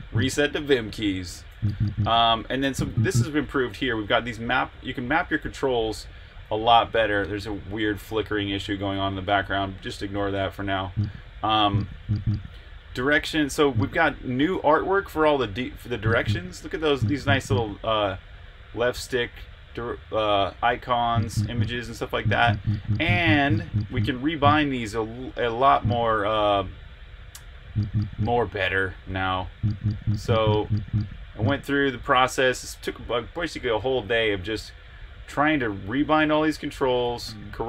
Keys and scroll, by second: 0.0-2.6 typing.